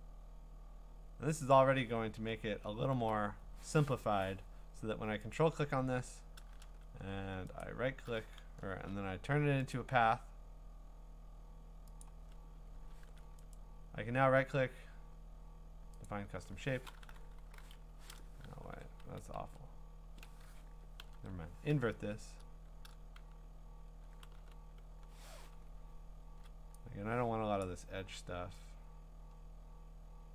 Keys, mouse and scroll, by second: 1.5 click, 2.1-2.7 scroll, 5.3 ctrl+click, 6.6 v, 7.6 right click, 9.7 click, 12.1 click, 13.0 a, 13.6 right click, 16.1 click, 17.0 w, 17.7 Escape, 18.7 ctrl+d, 19.0 ctrl+z, 19.4 ctrl+z, 21.0 ctrl+i, 24.3 b, 25.5-26.4 [, 27.6 click.